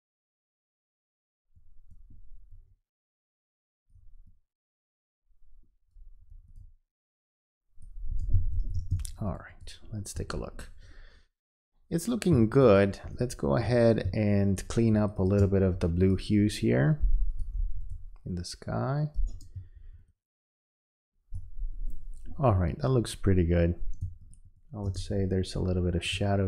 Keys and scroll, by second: 8.4 space, 12.3 space, 19.6 space, 24.0 space.